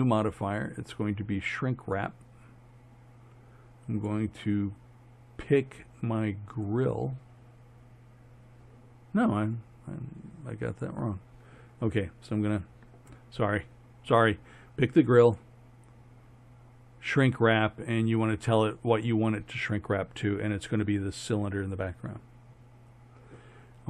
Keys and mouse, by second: 1.3 click, 4.0-6.6 drag, 10.7-12.3 drag, 12.3 right click, 13.2-14.9 drag, 15.3-17.3 drag, 19.0-21.3 drag.